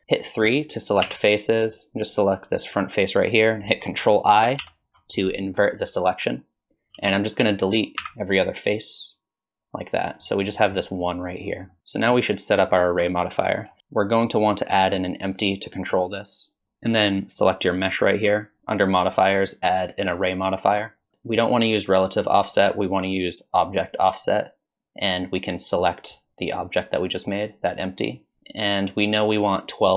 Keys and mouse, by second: 1.0 3, 1.7 click, 4.6 ctrl+i, 8.0 x, 10.5 middle click, 11.7 middle click, 11.8 Tab, 12.7 shift+middle drag, 13.8 shift+a, 19.0-20.3 drag, 21.3 drag, 22.6 click, 25.7 click.